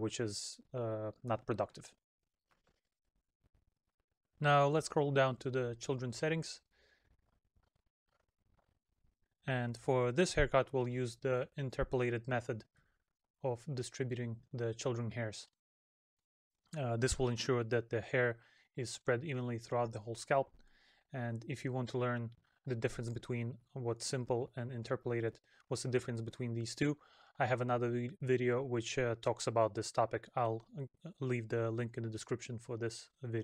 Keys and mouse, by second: 13.6 middle click, 18.9 middle click, 29.5 middle click, 32.8 middle click.